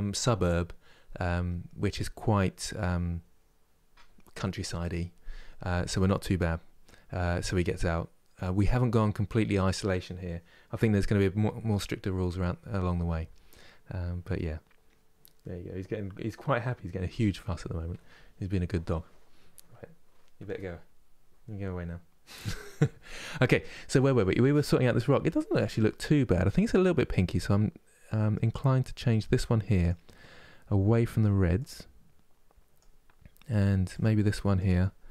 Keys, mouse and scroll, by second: 25.0-25.9 scroll up 2, 28.9-31.2 drag, 33.7-35.1 drag.